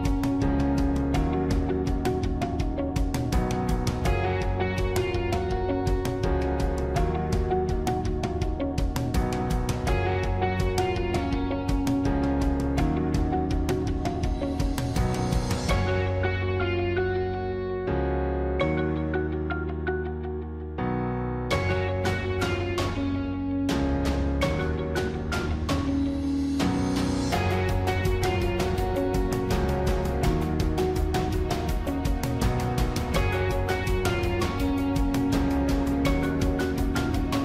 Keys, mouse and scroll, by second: 1.4 ctrl+-, 1.5 ctrl++, 4.1 ctrl+-, 4.6 ctrl++, 6.3 ctrl++, 7.4 ctrl+-, 11.8 ctrl+-, 13.2 ctrl+-, 15.0 ctrl+-, 15.1 ctrl++, 20.7 ctrl++.